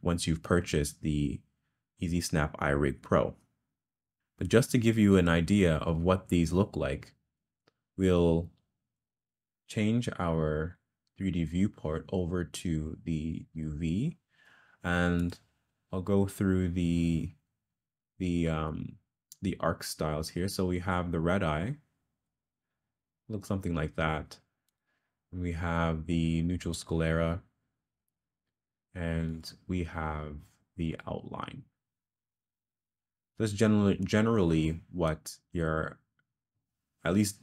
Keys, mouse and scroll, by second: 10.7-13.5 drag.